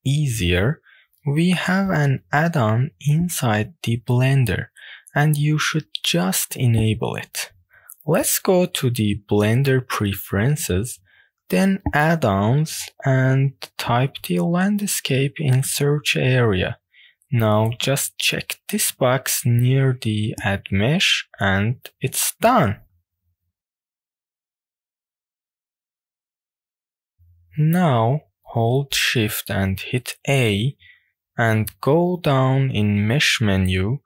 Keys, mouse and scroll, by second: 0.6 click, 1.5-1.8 shift+middle drag, 2.0-3.3 middle drag, 3.5-4.4 middle drag, 6.6-8.3 drag, 25.0 click, 25.8 click, 29.1 shift+a.